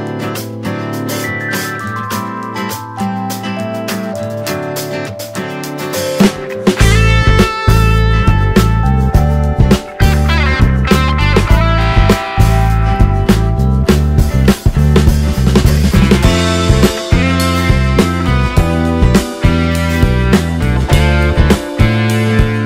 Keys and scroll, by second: 1.3 ctrl+space, 9.1 space, 9.9 space, 12.1 ctrl+z, 16.2 space.